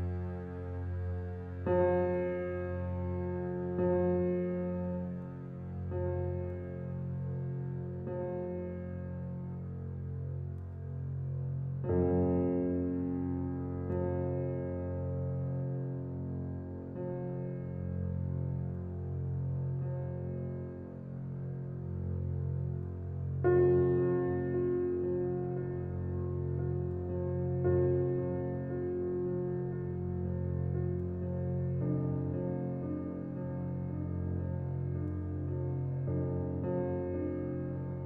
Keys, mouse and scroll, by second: 0.6 click, 1.1-1.5 scroll down 4, 1.5-3.5 shift+middle drag, 3.5 click, 4.9 click, 7.7-8.1 middle drag, 8.1-8.5 scroll up 5, 8.5-10.8 middle drag, 10.8-11.8 drag, 12.4 shift+middle drag, 12.7 middle drag, 12.9 scroll down 4, 13.3-14.8 shift+middle drag, 15.4 click, 16.4 drag, 16.5-16.9 scroll down 1, 16.9-17.7 middle drag, 17.7-18.1 scroll up 5, 18.1-18.5 shift+middle drag, 18.5 click, 25.0 KP_0, 25.7-26.0 scroll down 5, 26.0-26.8 middle drag, 26.8-27.2 scroll up 2, 27.2-27.8 shift+middle drag, 27.8 click, 29.5-30.1 scroll down 2, 30.1-31.0 middle drag, 31.0-31.7 scroll up 4, 31.7 click, 33.5-34.4 scroll down 1, 34.4 shift+click, 36.3-37.1 drag, 37.4-37.8 scroll up 5, 37.8-38.0 shift+middle drag.